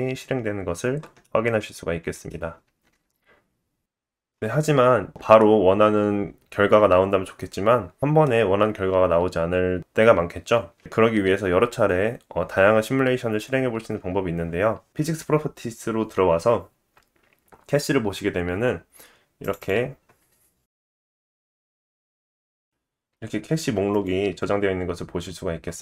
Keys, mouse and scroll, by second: 1.2 middle click, 2.7 space, 7.2 space, 7.7 middle click, 9.9 click, 9.9 middle click, 9.9 right click, 15.7 click, 17.5 click, 17.6 click, 22.2 KP_0, 24.0-25.8 drag.